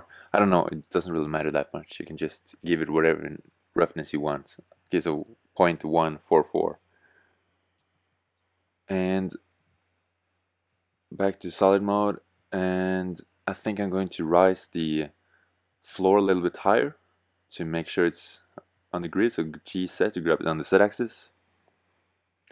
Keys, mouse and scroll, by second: 9.7 shift+z, 17.1 g, 22.4 g.